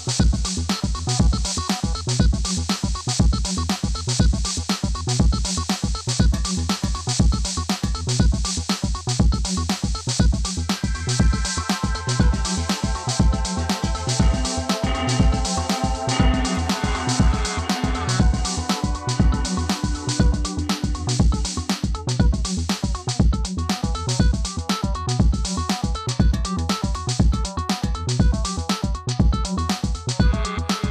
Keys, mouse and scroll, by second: 0.8-1.4 scroll down 1, 1.6 click, 3.1 right click, 4.9-5.6 scroll down 1, 6.3 click, 8.7 click, 10.6 click, 12.1 click, 12.7-13.2 scroll down 1, 13.2 click, 17.0 scroll up 1, 17.5 scroll down 1, 18.8 click, 22.8 click, 29.3 click.